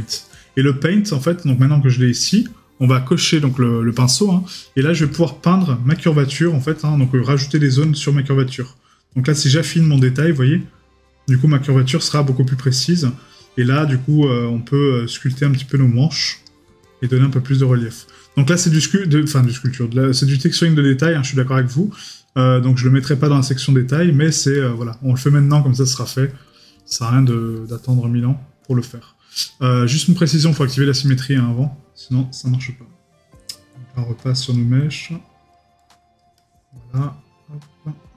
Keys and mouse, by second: 5.1 right click, 25.8 middle click, 26.9 right click, 27.8 middle click, 31.1 right click.